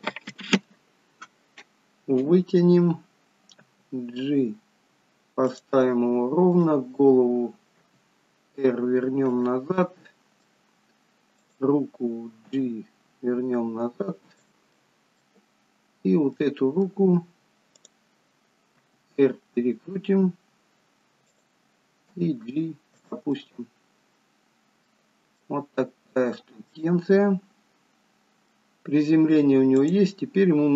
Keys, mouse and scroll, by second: 3.7 g, 6.6 click, 7.8 r, 9.8 middle click, 11.5 click, 12.6 g, 14.8 middle click, 16.4 middle click, 17.9 click, 18.8 r, 22.2 g, 23.4 middle click, 25.5 middle click, 26.8 middle click, 28.8 scroll down 1, 30.0 click.